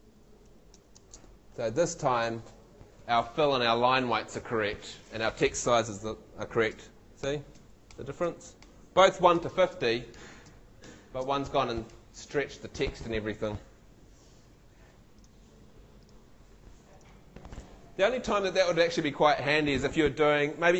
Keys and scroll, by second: 0.5 shift+Up, 1.0 shift+space, 6.7 shift+Down, 7.2 shift+Up, 7.6 shift+Down, 7.9 shift+Up, 8.2 shift+Down, 8.6 shift+Up, 9.0 shift+Down, 9.3 shift+Up, 9.7 shift+Down, 10.2 shift+Up, 10.5 shift+Down, 10.8 shift+Up, 11.2 shift+Down, 11.9 shift+Up.